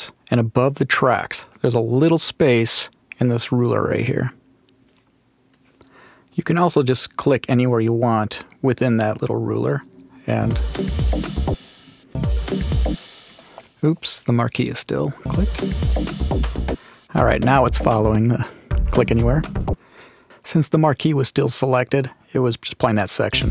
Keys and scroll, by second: 10.3 space, 15.1 space, 16.6 space, 23.2 space.